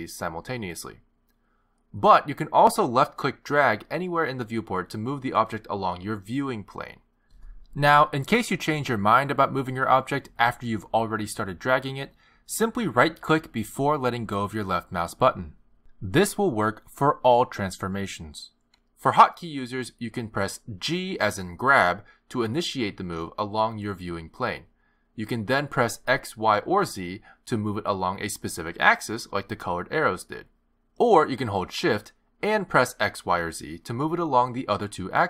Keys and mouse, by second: 2.4 click, 4.9 click, 12.2 click, 21.8 g.